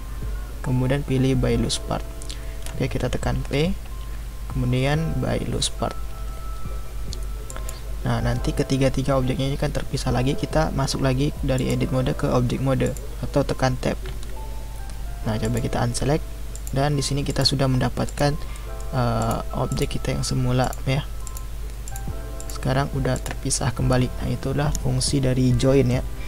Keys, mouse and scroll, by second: 3.4 p, 11.6-12.9 drag, 14.1 Tab, 15.4 click, 16.5 click, 17.3 click, 18.1 click, 18.5-19.2 middle drag, 19.2 click, 19.7 click, 20.6 click, 21.2 click, 21.8 click, 22.4 click, 23.1 click.